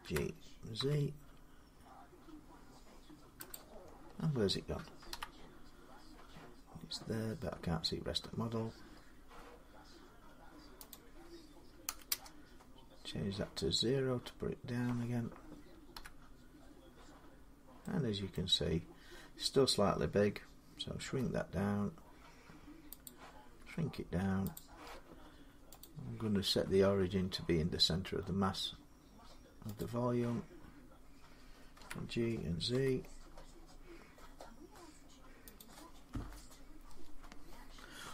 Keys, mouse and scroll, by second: 0.0-0.6 typing, 3.0 scroll up 10, 3.0 z, 3.3 click, 3.5-4.9 scroll down 11, 5.7-8.3 scroll, 8.3-8.8 scroll, 8.8 scroll down 10, 10.7 click, 11.6 0, 11.9 Return, 13.3 scroll down 2, 13.5-15.7 scroll, 17.0-21.4 middle drag, 20.8 s, 22.8 click, 23.4 s, 24.3 click, 25.6 click, 29.6 click, 31.5-33.5 drag, 31.5-32.5 typing, 33.9 click, 33.9 z, 35.4-38.1 drag.